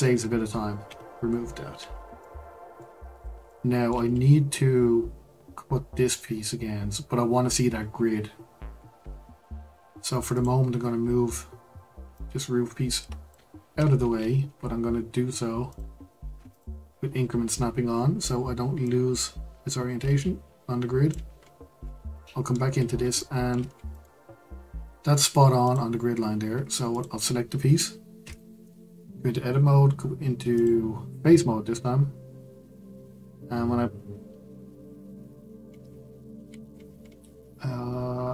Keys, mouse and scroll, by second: 0.8 Delete, 1.8-2.2 scroll down 1, 2.2-3.1 shift+middle drag, 3.1-3.5 scroll up 2, 3.5-4.1 shift+middle drag, 4.1-7.1 scroll down 3, 7.8-8.5 scroll down 2, 8.5 scroll down 3, 8.6-9.0 scroll up 1, 9.0-10.3 scroll down 3, 10.3 click, 10.8-12.1 scroll down 3, 12.1 click, 13.6 ctrl+z, 15.7-18.7 drag, 18.8 click, 21.4-22.2 scroll up 7, 22.2-22.7 shift+middle drag, 22.7-23.2 scroll up 1, 23.2-23.7 shift+middle drag, 23.7 scroll up 1, 23.9-25.7 right drag, 26.9 click, 28.2 Tab, 30.5-33.6 drag, 35.1-36.4 scroll down 5, 36.4-37.5 scroll up 6, 37.5-38.3 scroll up 2.